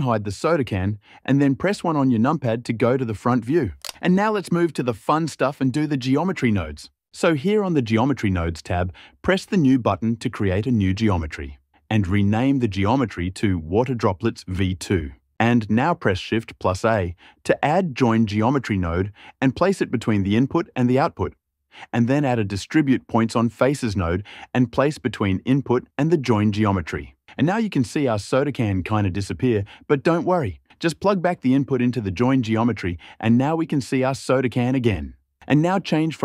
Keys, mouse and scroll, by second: 1.1 click, 1.5 KP_1, 2.3 `.